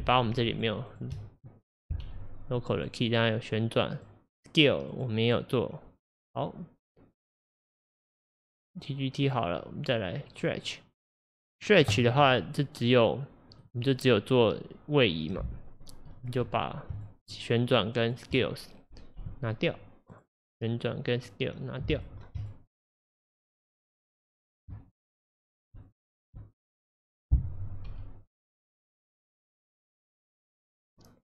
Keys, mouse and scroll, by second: 0.6 shift+click, 0.9 shift+click, 2.1 Delete, 2.8 click, 3.1 click, 4.0 click, 4.9-8.3 drag, 9.3 click, 10.4-11.2 drag, 12.9 click, 13.6 click, 15.3 click, 16.3 shift+click, 17.0 shift+click, 17.3 shift+click, 17.7 shift+click, 18.1 shift+click, 19.3 Delete, 20.2 click, 21.2-22.5 drag, 22.7 shift+click, 23.4 shift+click, 23.7 shift+click, 24.9 shift+click, 25.1 shift+click, 27.9 Delete, 29.4 click.